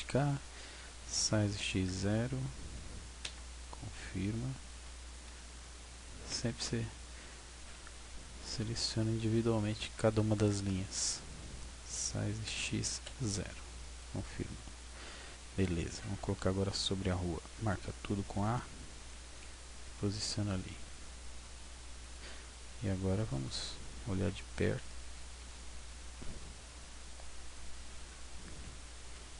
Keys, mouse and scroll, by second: 1.1 s, 4.7 a, 5.2 c, 7.7 b, 11.9 s, 14.1 click, 14.7-15.1 scroll up 1, 15.1-15.7 scroll down 1, 17.5 a, 17.8 a, 19.3 g, 22.1 click, 22.6-23.3 scroll up 1, 23.3 shift+middle click, 24.4 scroll up 1, 24.9 scroll down 1, 25.5 middle click, 26.3 scroll up 1, 26.7 scroll down 1.